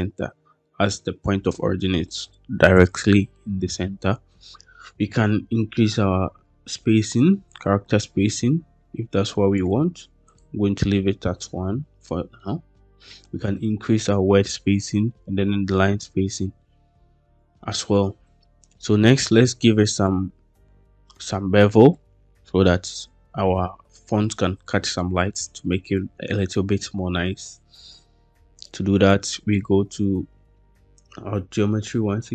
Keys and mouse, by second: 7.5-9.5 drag, 10.1-11.7 drag, 12.3 middle click, 20.0-21.0 middle drag, 21.8-22.5 middle drag.